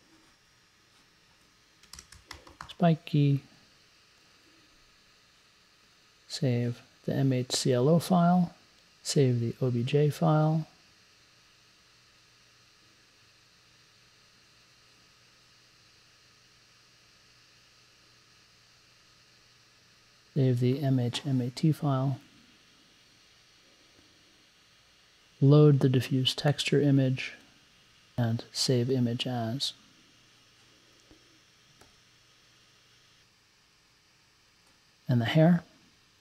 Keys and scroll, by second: 1.7-3.1 typing.